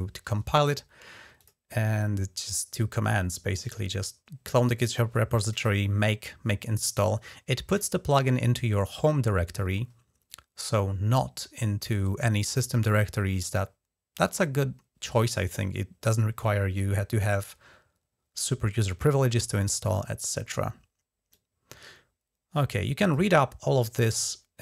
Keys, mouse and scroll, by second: 1.2 click, 1.4-3.1 drag, 19.6-21.1 scroll down 1, 21.1-23.1 drag.